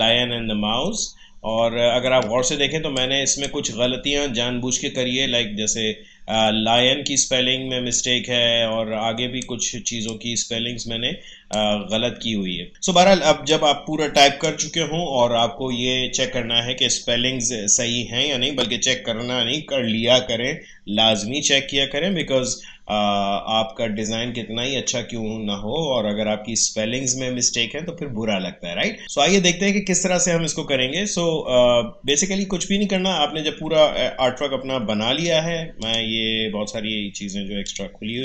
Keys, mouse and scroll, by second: 0.0-0.5 alt+scroll up 1, 2.7 space, 2.9 click, 3.2 space, 7.9 click, 8.0 space, 10.0 click, 10.1 space, 12.0 Tab, 12.5 space, 12.7 alt+scroll down 1, 13.2 space, 13.5 click, 13.8 space, 18.7 Tab, 35.8 click.